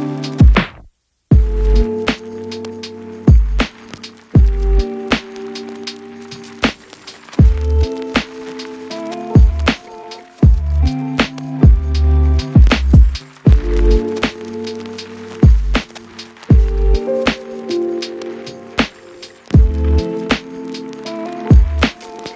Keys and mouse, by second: 0.8 shift+middle click, 1.1 KP_Divide, 1.1 click, 1.1 a, 1.2-4.6 middle drag, 2.3 KP_Divide, 4.6 click, 4.8 Tab, 5.0 Tab, 5.8 shift+middle click, 6.5 shift+middle click, 7.1 shift+middle click, 8.3 ctrl+j, 8.7 a, 9.2 g, 9.4 ctrl+z, 10.4 F2, 10.9 Left, 11.1 Left, 11.9 shift+click, 12.8 middle click, 13.0 ctrl+shift+click, 13.4 ctrl+j, 14.5 middle click, 15.2 ctrl+F2, 15.4-16.4 middle drag, 15.6 Left, 16.4 shift+click, 16.4 middle click, 17.8-20.4 drag, 19.4 KP_Divide.